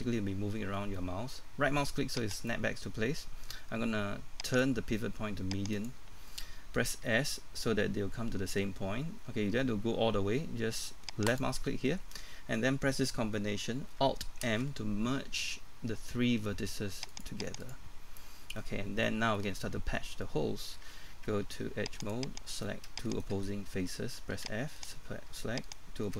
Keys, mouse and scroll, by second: 2.4 right click, 4.5 click, 7.0 s, 11.3 click, 14.4 alt+m, 17.1 click, 18.4 middle click, 19.1 scroll down 1, 19.3 middle click, 21.1 ctrl+Tab, 22.0 click, 22.5 right click, 23.1 shift+right click, 24.3 f, 24.8 right click, 25.6 shift+right click.